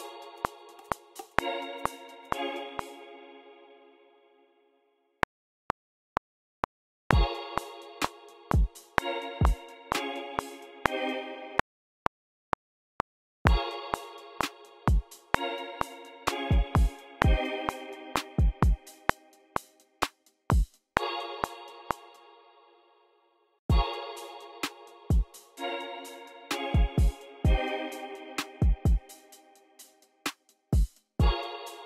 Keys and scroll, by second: 2.2 space, 2.4 BackSpace, 5.2 r, 10.7 space, 11.2 super+z, 11.5 r, 21.7-24.1 typing, 22.8 super+a, 24.5 super+r, 26.7 j, 27.7 alt+n, 30.1 alt+super+s.